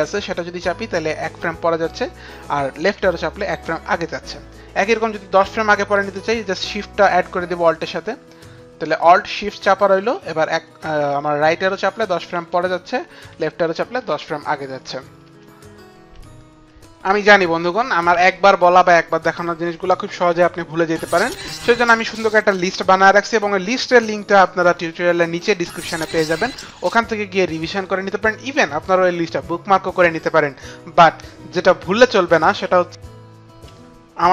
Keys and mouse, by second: 0.1 alt+Right, 4.3 alt+Left, 11.7 alt+shift+Right, 13.2 alt+shift+Left, 16.2 click, 21.2 click.